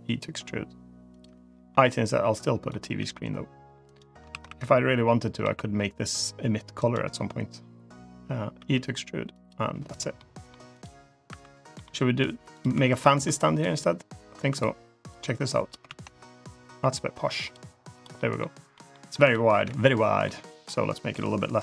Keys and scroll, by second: 1.6 i, 2.8 e, 4.2 ctrl+z, 5.3 s, 8.4 e, 11.3 2, 12.6 2, 13.1 3, 14.2 2, 15.7 ctrl+z, 19.4 `, 21.4 l.